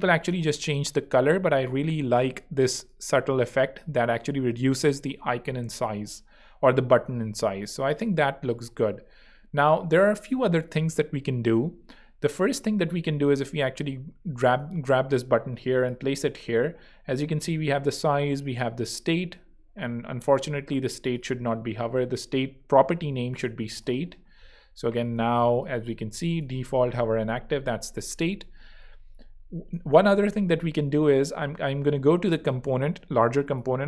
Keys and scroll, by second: 5.9 super+2, 8.0 super+x, 23.0-24.0 typing, 27.1 Escape.